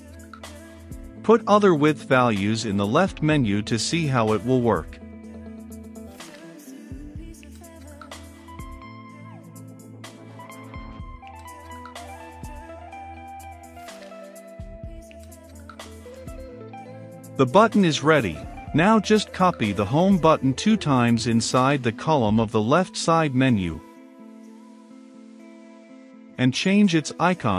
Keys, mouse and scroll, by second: 5.9-17.9 drag, 18.0 ctrl+c, 18.3 click, 19.7 middle click, 21.3 ctrl+v, 25.3-27.5 drag.